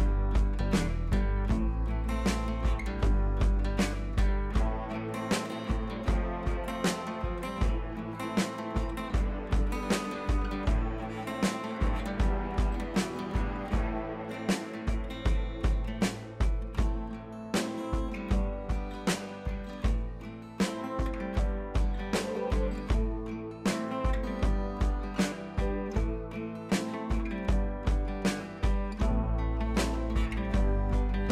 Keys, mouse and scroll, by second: 0.0 scroll up 1, 0.5-1.0 scroll down 1, 1.0-3.7 drag, 3.7 click, 7.5 scroll down 1, 8.1-9.7 typing, 8.4 scroll up 1, 9.2 click, 9.9 click, 12.5 click, 14.7 ctrl+z, 15.4 click, 16.5 click, 17.2 scroll down 1, 19.1 click, 25.6 scroll down 1, 26.2 click, 26.7 ctrl+t, 27.6-29.7 alt+drag, 29.7-31.3 alt+drag.